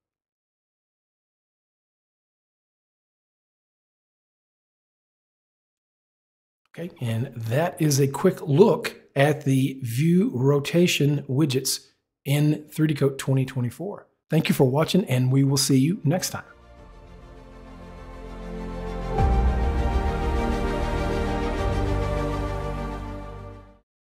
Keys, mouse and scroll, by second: 0.1 click, 1.3 click, 1.8 double click, 2.3 click, 2.8 click, 3.3 click, 4.3 click, 4.9 click, 7.4 middle click.